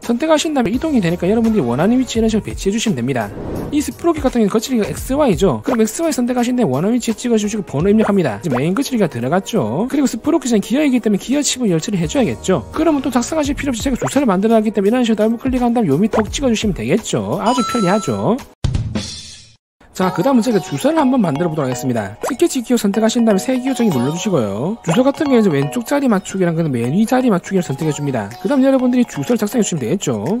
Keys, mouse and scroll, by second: 0.9 click, 1.3-2.4 drag, 2.7-3.0 scroll down 4, 6.5 click, 6.7 click, 7.7 click, 8.4 3, 9.2 click, 14.8 click, 15.0 click, 16.2 click, 16.9 right click, 23.0 click, 23.1 right click, 24.5 click, 26.4 click, 27.9 click, 29.4 w, 29.6 space, 29.9 space, 30.1 t.